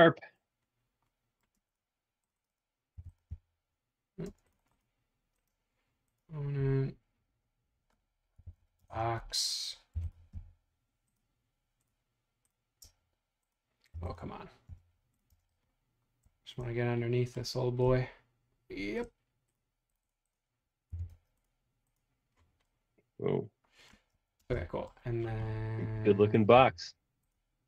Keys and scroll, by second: 1.7 space, 2.9 m, 4.2 space, 8.1-10.3 typing, 12.9 space, 13.9 m, 14.7 Caps_Lock, 15.3 space, 20.9 b, 24.0 space, 24.1 Escape, 24.5 space, 25.0 ⟲, 26.5 m.